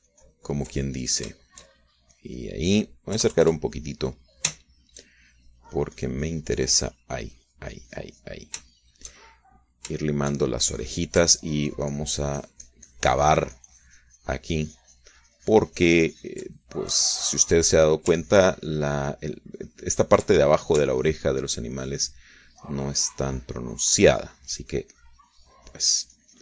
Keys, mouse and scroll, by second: 2.8 ctrl+shift+click, 3.9 shift+click, 4.6 KP_Add, 5.5-6.6 drag, 6.8-9.9 shift+drag, 10.2 shift+click, 10.8-12.2 shift+drag, 12.2 shift+middle click, 12.9-18.4 ctrl+drag, 18.4 middle click, 19.0-22.3 middle drag, 22.4-26.4 ctrl+drag.